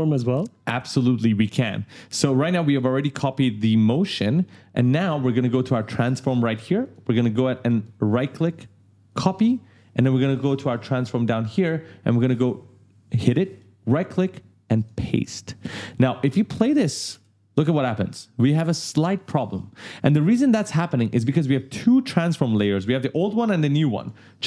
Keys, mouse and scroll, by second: 1.2 space, 1.6 click, 2.5 right click, 3.0 w, 6.6 click, 7.4 right click, 8.8 click, 10.1 scroll down 1, 10.8 click, 11.9 click, 13.3 right click, 14.5 click, 16.1 click, 16.9 space, 17.4 right click, 20.2 click, 23.7 click, 24.1-24.4 scroll down 1.